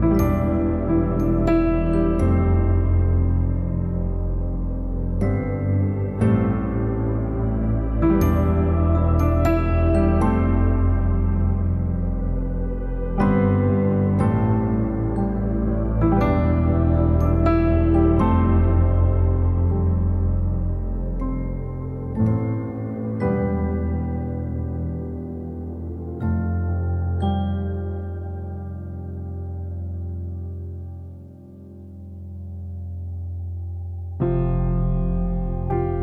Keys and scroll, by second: 9.6 ctrl+=, 34.2 ctrl+z.